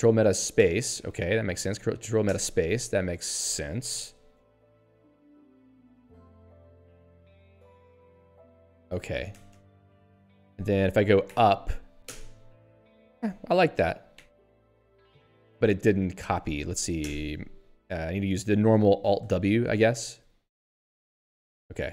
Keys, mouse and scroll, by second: 0.6 ctrl+alt+space, 1.3 ctrl+g, 1.7 ctrl+alt+b, 2.4 ctrl+alt+space, 6.3 ctrl+g, 6.9 ctrl+alt+b, 8.4 ctrl+alt+space, 9.9 ctrl+g, 11.3 ctrl+alt+u, 12.0 ctrl+alt+space, 14.2 y, 14.9 BackSpace, 16.3 Delete, 17.0 ctrl+alt+space, 19.2 alt+w, 20.1 ctrl+p, 20.9 ctrl+y.